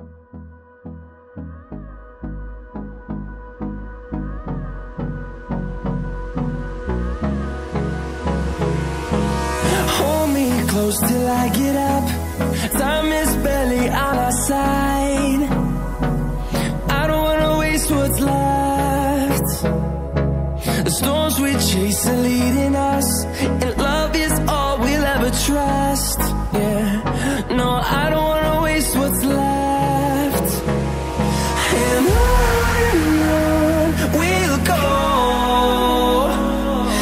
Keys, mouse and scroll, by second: 0.1 scroll up 1, 1.0 click, 1.8 scroll down 1, 3.6 right click, 5.8 scroll up 1, 6.6 click, 11.3 click, 15.8 click, 18.2 click, 21.1 click, 22.2-22.7 scroll down 1, 22.7-23.3 scroll up 1, 23.8-25.3 scroll down 1, 25.3 scroll down 1, 25.5 double click, 27.8 scroll down 1, 28.4 scroll down 1, 29.4 click, 34.7-35.4 alt+scroll up 1, 35.4 click, 36.4-36.9 scroll up 1, 36.9-37.0 scroll down 1.